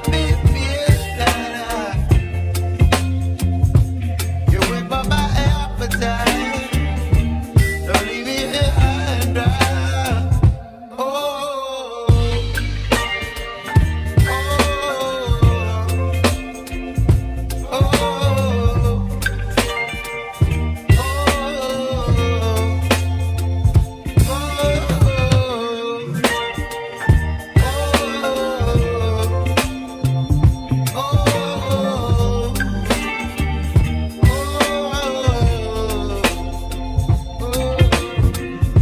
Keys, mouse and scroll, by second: 1.0 s, 4.7 g, 8.1 s, 10.1-13.1 shift+middle drag, 13.7 `, 14.6-15.1 scroll up 5, 15.1-15.8 shift+middle drag, 15.8 s, 18.3-19.9 middle drag, 19.9-20.3 scroll down 1, 21.1-23.3 scroll down 1, 23.3 scroll down 1, 26.1 Tab, 27.2 3, 28.2 click, 28.8-31.3 middle drag, 31.3 i, 33.0 Tab, 36.6 ctrl+a, 37.2 ctrl+a, 37.7 Tab.